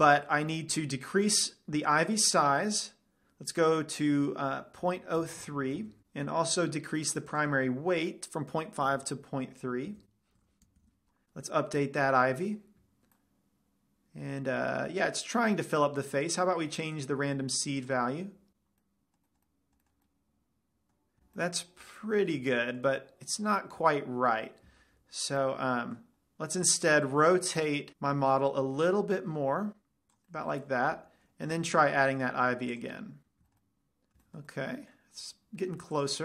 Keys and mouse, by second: 2.9-4.5 drag, 7.8-9.7 drag, 10.6 BackSpace, 12.9-14.3 drag, 13.7-15.6 middle drag, 17.4-19.2 drag, 19.2-20.5 middle drag, 25.2 ctrl+z, 28.6 r, 30.5-32.0 drag, 30.9-32.0 right drag, 32.0 shift+a, 35.0-35.3 middle drag, 35.4 middle click.